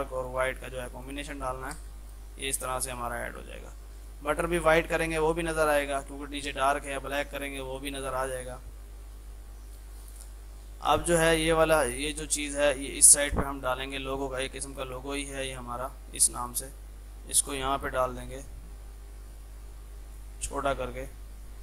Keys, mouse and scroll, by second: 1.8 space, 2.8 click, 6.4 shift+click, 7.6 F3, 9.8 click, 13.2 ctrl+g, 13.6-15.7 drag, 15.7 ctrl+z, 16.5 shift+click, 17.2 right click, 18.0 ctrl+g, 19.5-21.6 shift+drag.